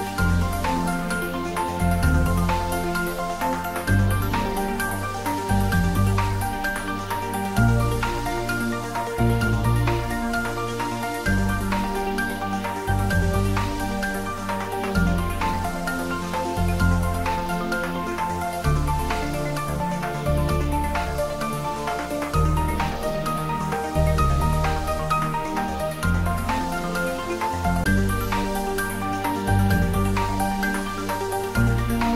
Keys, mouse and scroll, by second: 7.9-8.2 scroll up 1, 12.5-14.8 click, 13.2 right click, 14.9 click, 16.9 0, 19.1 Return, 21.5-23.1 drag, 25.3 typing, 26.3-27.0 typing, 27.1 Return, 29.8-30.2 scroll up 1.